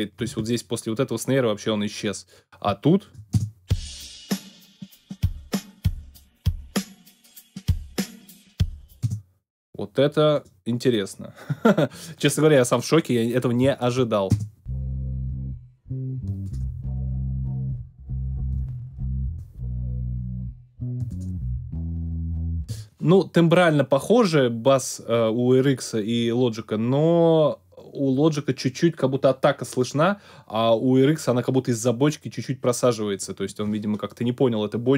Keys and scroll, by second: 3.3 alt+space, 4.2 space, 9.0 space, 14.3 alt+space, 15.0 space, 22.6 space.